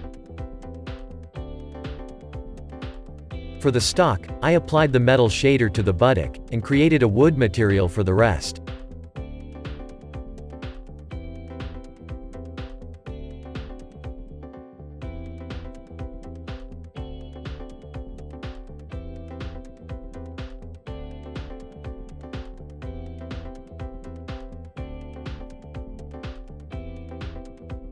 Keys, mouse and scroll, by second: 0.1-0.5 middle drag, 1.1-2.2 shift+middle drag, 2.2-2.8 scroll up 5, 2.8 click, 3.1-3.4 scroll up 1, 3.4 Tab, 4.0-6.1 shift+middle drag, 6.1 scroll down 2, 6.4-8.8 middle drag, 8.8 click, 9.6 shift+middle click, 10.6 middle click, 11.2-11.8 scroll up 3, 12.8-14.9 middle drag, 14.9 ctrl+KP_Add, 15.3 ctrl+KP_Add, 17.5 ctrl+KP_Add, 25.9-27.9 drag.